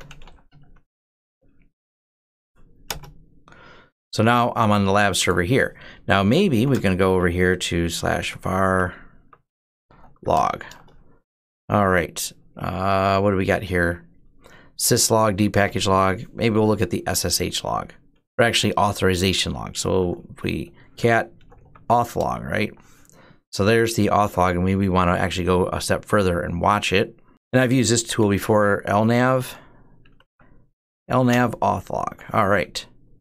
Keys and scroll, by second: 0.0-0.5 typing, 1.6-2.1 typing, 2.7 Return, 6.1-10.4 typing, 8.8 Tab, 10.5 Return, 19.4-22.6 typing, 24.9 Up, 25.3 Home, 27.3 Delete, 27.5-30.1 typing, 31.1 Return, 32.4 Down, 32.9 Down.